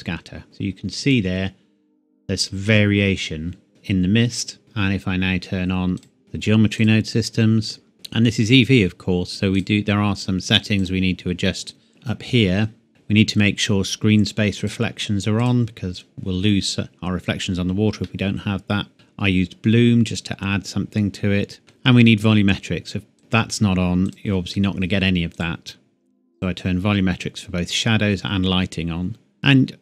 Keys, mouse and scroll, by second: 0.4 click, 3.7 click, 6.0 click, 6.8 click, 11.4 scroll down 1, 14.6 click, 18.0 middle click, 20.8 scroll down 1, 21.6 middle click, 23.2 click.